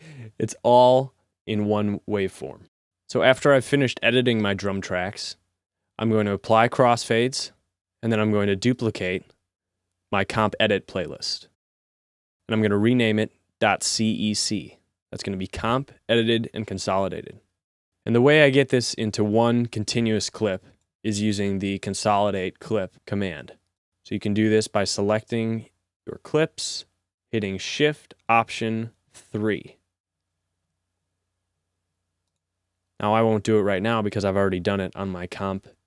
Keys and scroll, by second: 30.4 alt+shift+3.